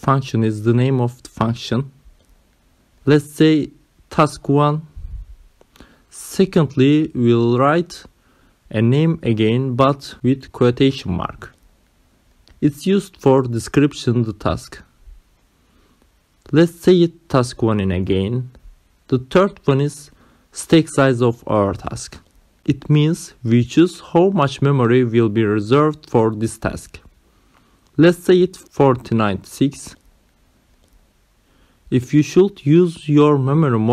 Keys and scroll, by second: 1.0 Left, 1.7 space, 2.2 Left, 2.4 space, 6.4 t, 6.8 a, 7.8 1, 9.9 ,, 10.1 space, 10.5 `, 11.7 Left, 17.1-20.0 typing, 18.7 Right, 29.5-31.0 typing.